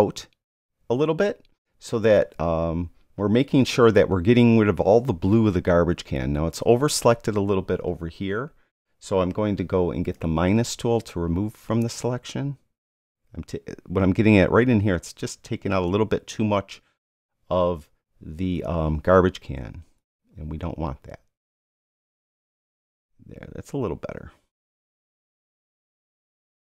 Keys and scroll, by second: 13.1 [.